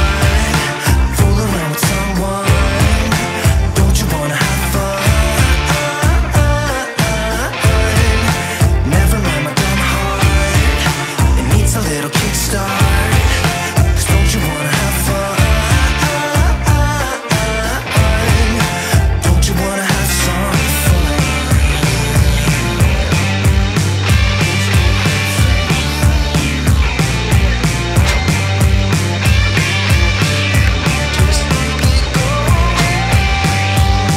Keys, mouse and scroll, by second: 2.0-8.1 drag, 12.4-13.1 typing, 14.3 typing, 14.8-25.5 drag, 29.8 click, 30.0 right click, 31.7 click.